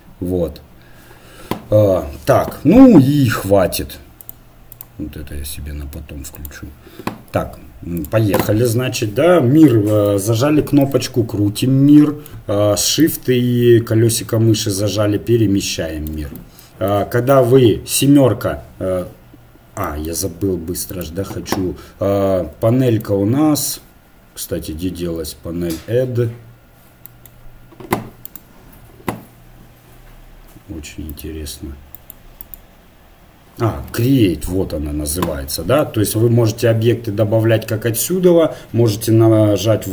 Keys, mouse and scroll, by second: 8.7-10.5 middle drag, 18.2 KP_7, 20.9-22.6 drag, 23.1-28.3 middle drag, 28.3-30.0 right drag, 31.1-34.0 drag.